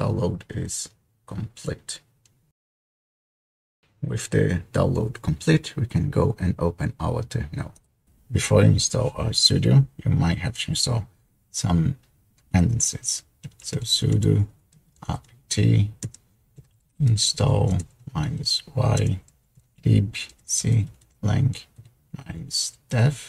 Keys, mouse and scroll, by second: 13.7-22.6 typing.